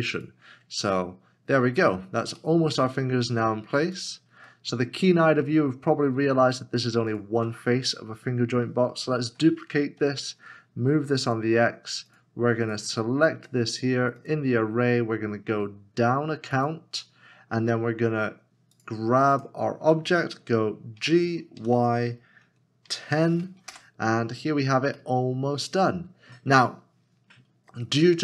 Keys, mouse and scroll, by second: 2.4 middle click, 2.8 scroll down 1, 4.7 middle click, 7.1 shift+click, 9.0 s, 21.0 g, 21.5 y, 23.0-24.2 typing, 25.0 Return, 25.2 middle click.